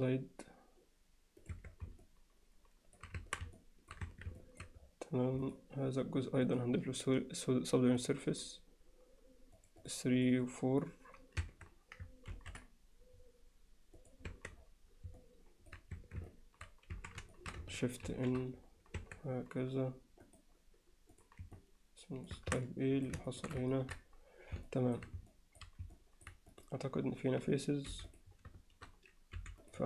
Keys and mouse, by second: 1.6 Tab, 2.0-3.0 alt+middle drag, 3.2 Tab, 3.6 alt+middle click, 4.1 Tab, 4.4 alt+middle drag, 5.5 click, 6.5-8.1 drag, 9.7 click, 9.8 click, 10.3 click, 11.5 Tab, 12.3 ctrl+r, 14.3 Tab, 15.2-15.7 alt+middle drag, 16.0 Tab, 16.3 alt+middle click, 17.0 a, 17.3 alt+shift+middle click, 18.2 shift+n, 19.0 Tab, 21.2 right drag, 21.6-22.3 alt+middle drag, 22.4 Tab, 22.6-23.1 alt+middle drag, 23.3 alt+shift+middle click, 23.7 ctrl+middle click, 24.7 alt+middle click, 25.3 alt+middle click, 26.0 alt+middle click, 27.9 4, 28.1 click, 29.4 4.